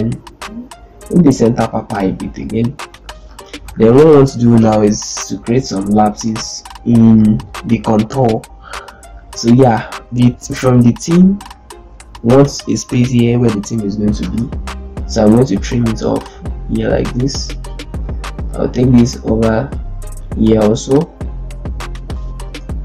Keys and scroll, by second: 6.1 ctrl+space, 14.1 ctrl+space.